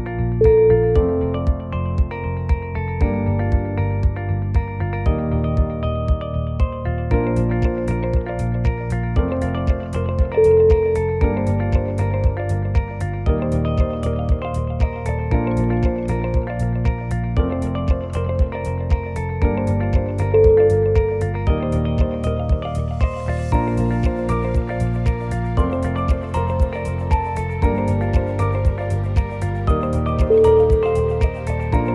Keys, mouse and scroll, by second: 0.1 shift+middle click, 0.5 shift+middle click, 0.7 click, 1.2 shift+a, 3.8 click, 4.3 click, 6.0 click, 7.6 click, 8.4 r, 10.0 g, 12.0 g, 14.3 shift+middle click, 14.6 shift+middle click, 14.6-14.9 scroll up 6, 14.9 shift+middle click, 15.5 g, 17.4 g, 19.9-20.7 scroll up 1, 20.7 shift+click, 21.5 click, 22.0 f, 22.4 click, 22.9 g, 24.7 click, 25.1 shift+click, 25.6 f, 25.9 click, 26.3 g, 28.0 click, 28.5 shift+click, 29.0 f, 29.3 click, 29.7 g, 31.7 click.